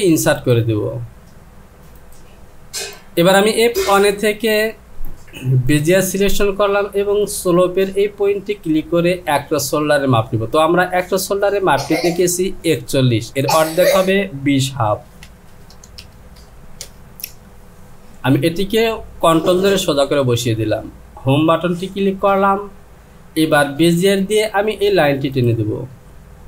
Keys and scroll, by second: 15.3 KP_2, 15.7 KP_0, 16.0 KP_Decimal, 16.8 KP_5, 21.8 Home.